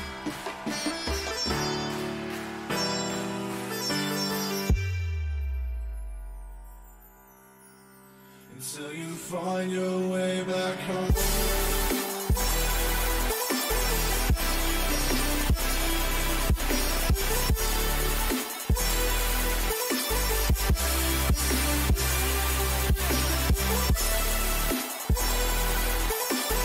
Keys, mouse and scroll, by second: 12.2 middle click, 13.7-21.6 middle drag, 19.2 a, 22.0 middle click, 22.4-26.6 middle drag.